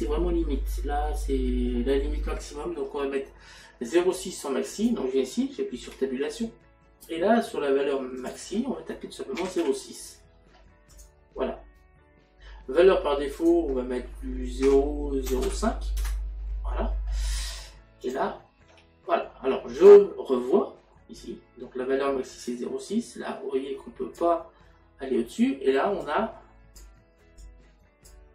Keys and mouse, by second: 4.8 click, 8.2 click, 9.4 KP_Decimal, 11.0 click, 13.4 click, 14.7 KP_Decimal, 18.1 click, 22.6 click, 26.1 click, 27.5 click.